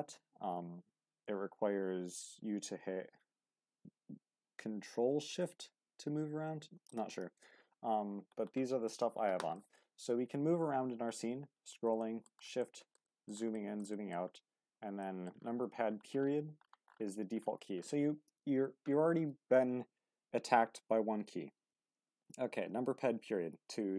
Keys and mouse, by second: 9.6-11.7 middle drag, 12.0 shift+middle drag, 12.6-13.3 middle drag, 13.5 middle drag, 13.9 shift+middle drag, 14.6 q, 15.0 middle drag.